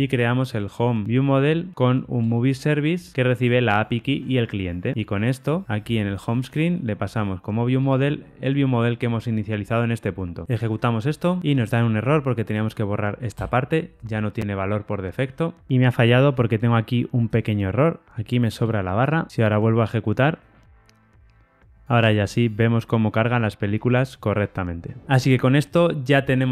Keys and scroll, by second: 1.0 Return, 2.2 Return, 7.7 Tab, 10.7 ctrl+r, 10.7 shift+F10, 15.2 ctrl+r, 15.2 shift+F10, 19.3 ctrl+r, 19.3 shift+F10.